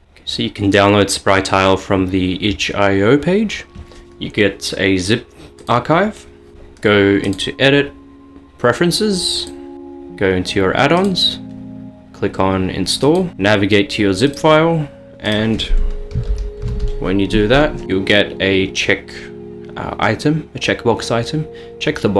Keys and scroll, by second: 0.0 ctrl+alt+shift+F11, 16.3-17.0 typing, 19.9 typing.